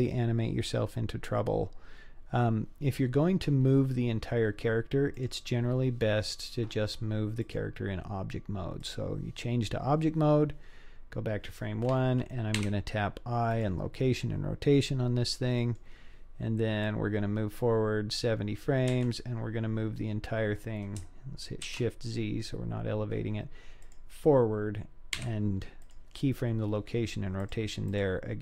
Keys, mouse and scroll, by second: 2.8-3.8 scroll up 1, 3.8-5.1 scroll down 2, 5.1 click, 7.4-9.0 drag, 12.6 i, 15.0-15.5 scroll down 1, 15.5 scroll down 1, 15.6 middle click, 16.9-18.7 drag, 18.9 g, 25.2 i, 26.4-27.4 scroll down 2, 27.4 click, 27.4 scroll down 1, 27.9 click.